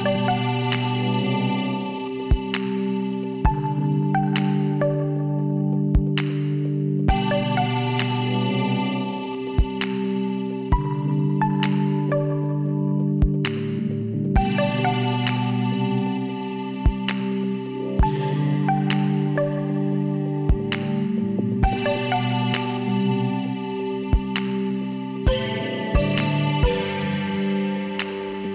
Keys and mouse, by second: 0.8-3.7 middle drag, 2.7 t, 3.7 g, 6.3 s, 9.1-10.7 drag, 12.9 KP_Decimal, 13.3 middle click, 15.2 middle click, 16.9 middle click, 17.6 z, 18.0-19.1 drag, 18.4 b, 22.0 z, 22.3 middle click, 23.6-25.5 drag, 27.1 middle click.